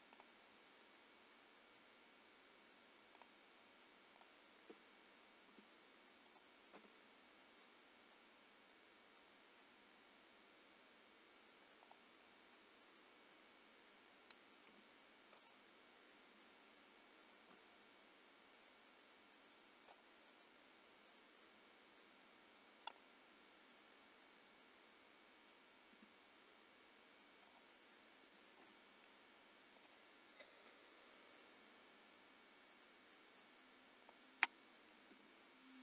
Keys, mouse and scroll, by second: 0.2 click, 0.6 middle click, 1.8-2.6 scroll up 3, 3.2 click, 4.2 click, 5.6 r, 6.8 g, 12.2 middle click, 14.8 r, 16.4 g, 20.3 scroll down 2, 20.5 middle click, 23.1 click, 23.2 middle click, 25.9 r, 28.4 a, 28.6 i, 30.3 scroll down 3, 30.6 middle click, 32.6 scroll up 2, 32.9-34.0 scroll down 1, 34.0 click, 34.0-34.5 scroll down 1, 35.2 g.